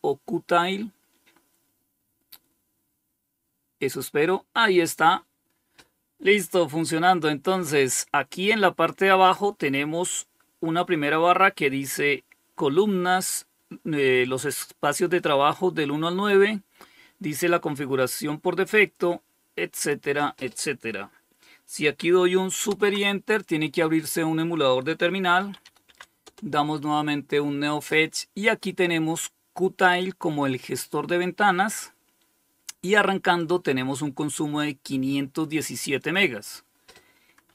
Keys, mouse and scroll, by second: 19.0 click, 21.9 super+Return, 24.2-25.4 typing, 25.4 Return, 29.0-30.4 drag, 32.6-33.8 drag, 37.1-37.5 typing.